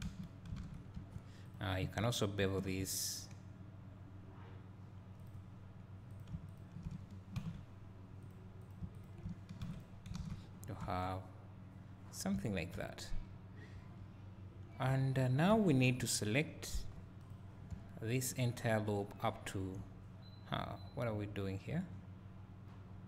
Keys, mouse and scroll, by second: 0.1 f, 0.6 alt+a, 1.0 1, 1.5 click, 2.5 ctrl+shift+b, 5.6-6.1 scroll up 2, 6.1 scroll up 1, 6.2 click, 6.6 shift+click, 8.7 click, 9.0 shift+click, 10.2 alt+a, 10.6 scroll down 2, 10.8 `, 11.4 `, 13.2 Tab, 14.9 2, 15.5 `, 16.8 3, 17.3 click, 17.7 `, 18.6 click, 19.9 a.